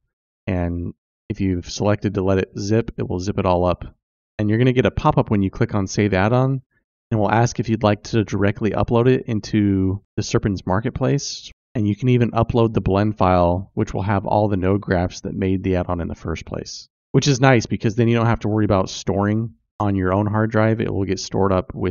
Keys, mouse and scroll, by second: 2.8 click, 19.4 click.